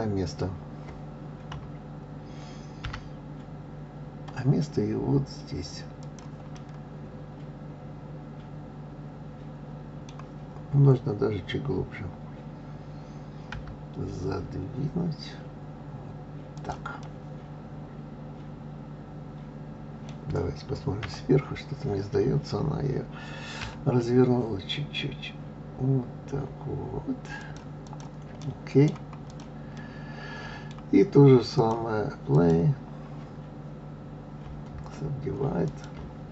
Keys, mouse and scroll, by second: 1.5 KP_3, 2.8 g, 6.5-9.5 middle drag, 17.0-20.1 middle drag, 21.0 KP_7, 23.6 r, 27.8 click, 29.3 click, 29.7-31.6 middle drag, 31.6 click, 32.3-35.3 drag, 35.7-36.3 drag.